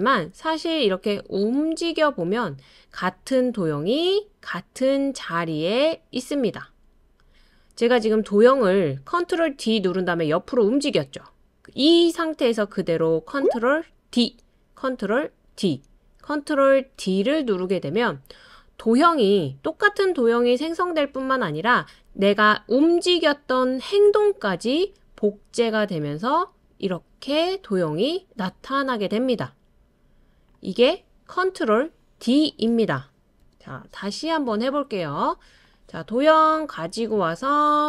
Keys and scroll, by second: 14.1 super+d, 15.5 super+d, 17.0 super+d, 33.4 BackSpace.